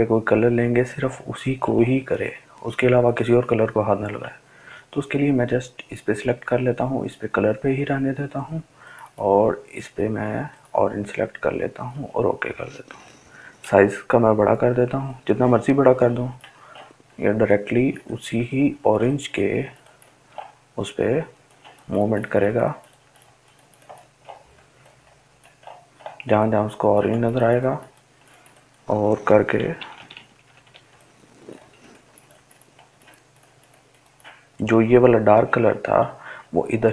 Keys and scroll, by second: 15.5-16.6 ], 16.8 ], 31.5-32.7 typing.